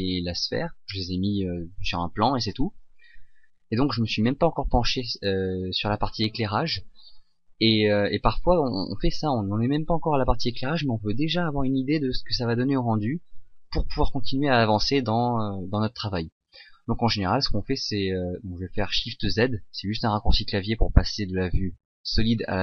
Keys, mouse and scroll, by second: 19.4 shift+z.